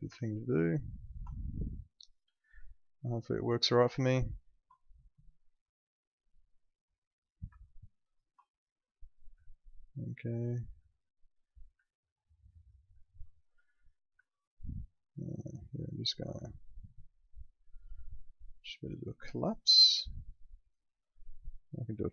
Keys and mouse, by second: 1.0 ctrl+click, 4.4 ctrl+click, 8.1 ctrl+click, 9.5 alt+middle click, 10.9 alt+middle click, 11.8 alt+middle click, 13.0 alt+middle click, 13.5 click, 14.2 alt+middle click, 17.3 click, 22.0 click.